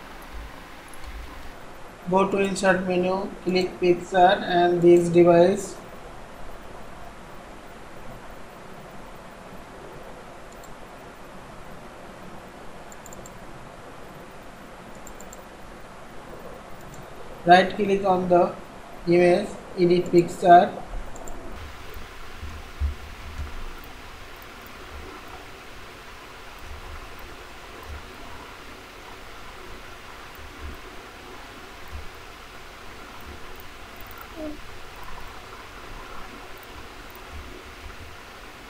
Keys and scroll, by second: 22.4 ctrl+x, 23.4 ctrl+v, 24.3 ctrl+v.